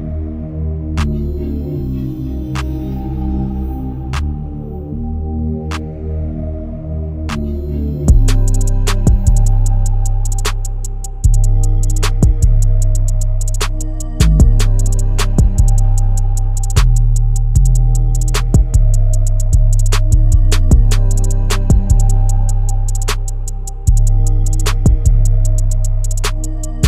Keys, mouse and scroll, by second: 1.6 scroll up 1, 2.3 click, 3.1 scroll down 1, 3.9 click, 4.5 scroll up 1, 5.2 click, 5.7 scroll up 1, 5.8 scroll down 1, 6.7 click, 7.6-8.2 scroll down 1, 8.2-11.1 drag, 11.1 scroll down 1, 11.3-11.7 scroll up 1, 11.7 click, 12.3-13.0 scroll down 1, 13.0 click, 13.2-14.2 scroll up 1, 14.3 scroll down 1, 14.5-15.1 scroll up 1, 16.1 click, 16.3-16.9 scroll down 1, 16.9-17.4 scroll up 1, 17.4-17.8 scroll down 1, 17.8-18.7 scroll up 1, 19.3-26.8 drag.